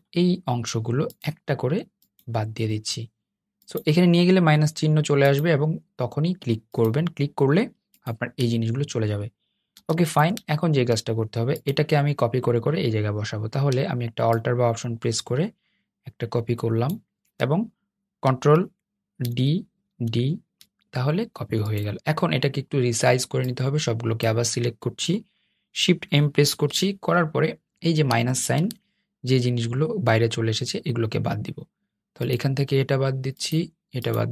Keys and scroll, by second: 19.0 super+d, 19.6 super+d, 25.2 shift+m.